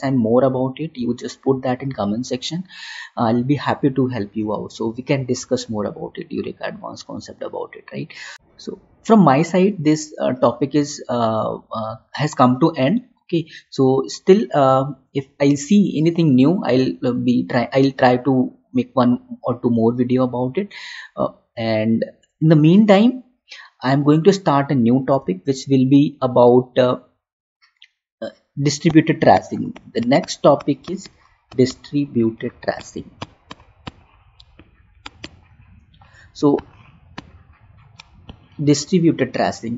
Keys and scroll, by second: 25.2 Right.